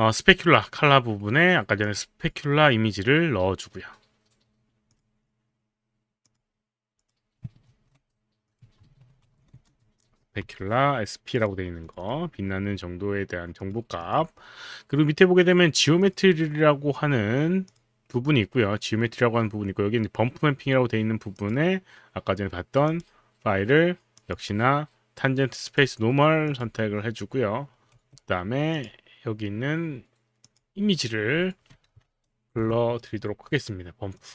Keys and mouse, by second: 1.8 click, 5.0 click, 6.3 click, 7.0 click, 7.7 ctrl+v, 8.5 click, 8.9 ctrl+a, 9.2 ctrl+v, 9.6 Return, 11.3 click, 11.9 click, 13.6 click, 14.0 click, 16.0 click, 17.6 click, 21.4 click, 22.9 click, 24.2 click, 25.6 click, 26.5 click, 27.9 Escape, 28.7 click, 30.4 click, 31.9 ctrl+v, 32.6 Return, 34.2 click.